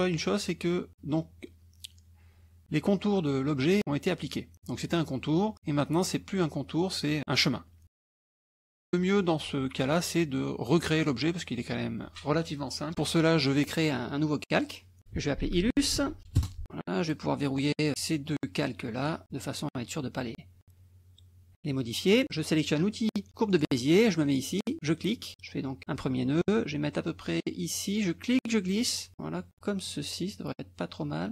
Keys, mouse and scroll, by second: 7.9 -, 9.2 click, 14.5 click, 15.4-16.7 typing, 17.0 click, 19.0 click, 23.5 click, 24.8 click, 28.5-31.3 drag.